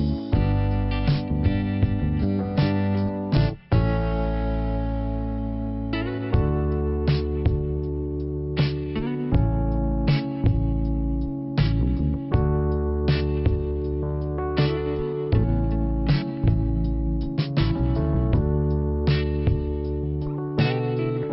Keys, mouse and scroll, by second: 0.0 right click, 0.1 right click, 0.8 click, 0.9 click, 1.0 click, 1.1 click, 12.5 click, 15.1 click, 15.9 click, 18.2 click, 18.2 ,, 19.4 click, 20.7 click.